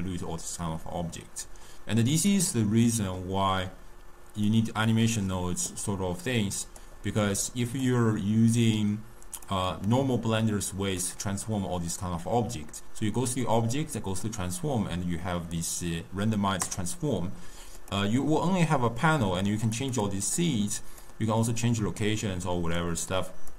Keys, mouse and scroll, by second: 4.4-7.4 drag, 7.6 click, 8.6 click, 10.9-14.1 drag, 17.7-23.5 drag.